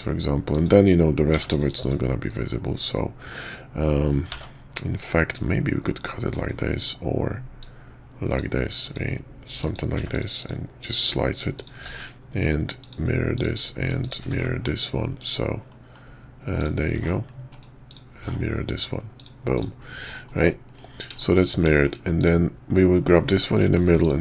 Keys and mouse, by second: 4.4 ctrl+z, 5.3-6.3 drag, 7.6-8.4 drag, 10.4 click, 11.6 click, 11.8 alt+x, 12.8 drag, 13.3 click, 14.0 shift+click, 14.3 alt+x, 15.2 click, 15.7-16.0 middle drag, 16.6 click, 17.0 alt+x, 17.9 click, 18.2 alt+x, 19.2 click, 19.5 click, 20.1 middle click, 20.7 KP_5, 21.2 shift+middle click, 21.7 shift+click, 22.2 click, 23.5 q.